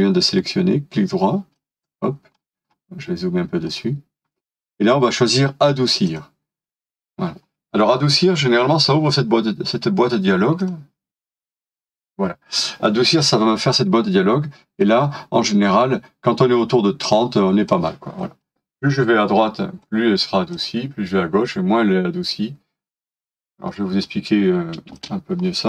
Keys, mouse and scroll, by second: 0.4 right click, 2.3 scroll up 1, 3.7 right click, 7.5 scroll down 1, 11.3-11.9 scroll up 1, 23.7 scroll down 1, 24.9 space, 25.4-25.6 scroll down 1.